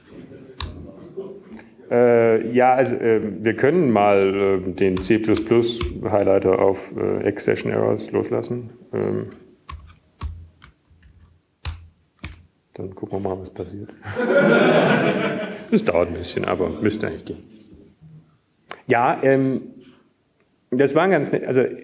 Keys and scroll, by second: 1.3 ctrl+Down, 2.8 ctrl+x, 2.8 k, 4.4-8.0 typing, 8.3 Down, 8.8 Return, 9.3 typing, 13.5-15.5 typing.